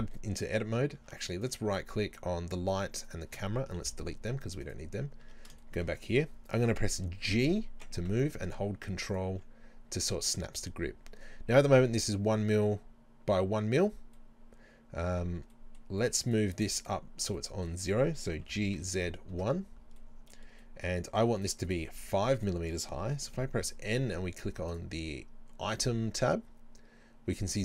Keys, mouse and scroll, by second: 1.4 right click, 3.1 shift+right click, 3.8 Delete, 4.6 right click, 5.2 Tab, 5.7-9.2 middle drag, 7.3 g, 9.2 ctrl+click, 14.2-16.0 middle drag, 16.0 right click, 16.3 shift+right click, 16.8 shift+right click, 17.4-18.4 middle drag, 18.4 g, 19.4 KP_Enter, 20.0 middle click, 21.4 right click, 21.7 shift+right click, 22.0 shift+right click, 23.4 n, 24.7 click.